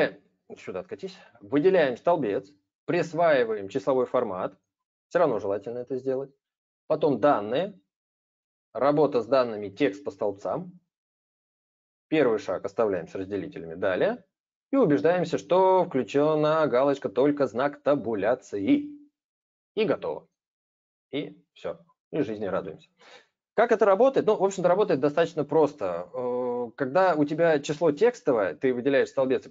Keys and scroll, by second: 0.6 ctrl+z, 24.1 ctrl+z, 24.2 ctrl+z.